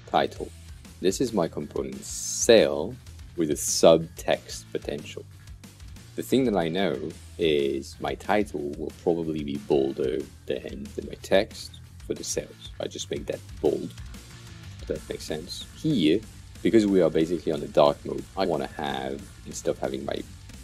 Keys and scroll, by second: 0.0-0.6 typing, 1.3 super+a, 1.9-3.0 typing.